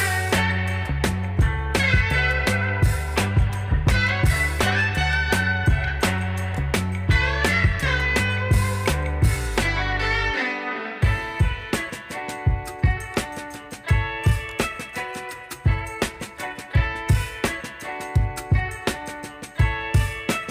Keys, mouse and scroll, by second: 0.1-6.3 drag, 6.3 right click, 7.5 click, 12.9 click, 17.7-20.5 drag.